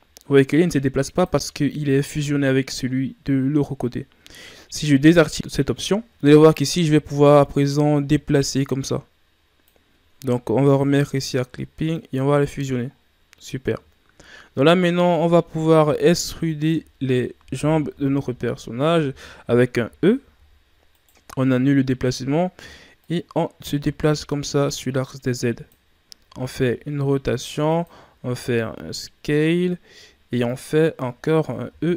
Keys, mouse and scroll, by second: 5.3 click, 5.8 ctrl+scroll down 1, 6.5-9.6 drag, 10.6 click, 11.9 click, 12.9-13.9 scroll down 2, 13.9-14.4 shift+scroll down 1, 14.4-15.1 scroll up 2, 15.1 Tab, 15.9 Tab, 16.5 alt+right click, 17.1-17.9 scroll down 1, 17.9 KP_1, 18.9-19.4 shift+scroll down 2, 19.4 e, 19.8 e, 23.0-26.0 drag, 28.2 s.